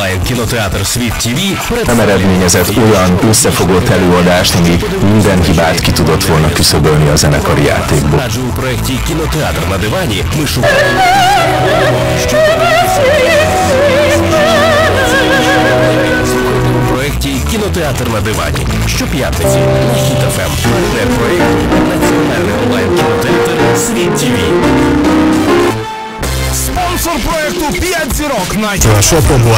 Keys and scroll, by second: 9.0 Page_Down, 17.7 Page_Down, 25.7 Page_Down.